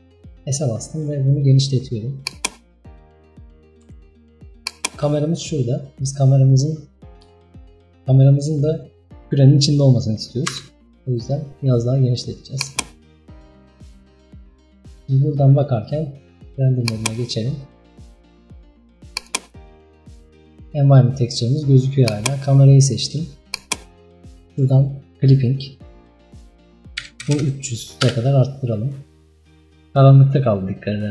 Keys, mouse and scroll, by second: 2.6-3.1 scroll down 6, 3.1-3.9 middle drag, 3.9 s, 5.0-6.6 scroll up 4, 6.6-7.1 scroll up 2, 7.1-7.5 scroll down 1, 7.5-7.9 shift+middle drag, 7.9-9.1 scroll up 2, 10.6 s, 13.5 KP_0, 15.0 scroll down 2, 15.5 scroll up 2, 17.0 click, 17.9 scroll up 2, 19.2-20.6 drag, 22.1 click, 23.5-28.2 drag, 28.2 KP_0.